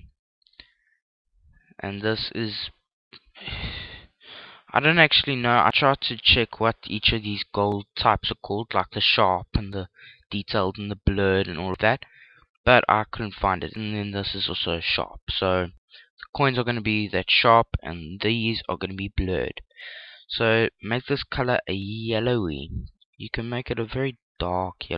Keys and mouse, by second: 20.0 click.